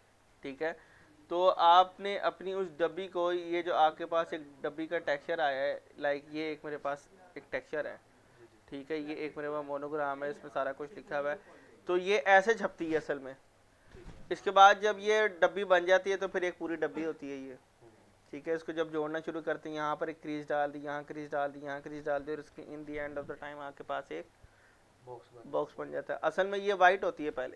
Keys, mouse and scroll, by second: 1.9-9.0 drag.